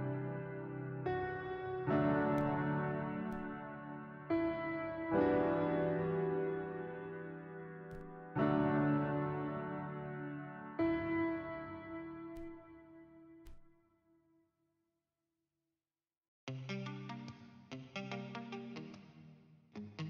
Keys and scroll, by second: 9.6 n, 11.0 a.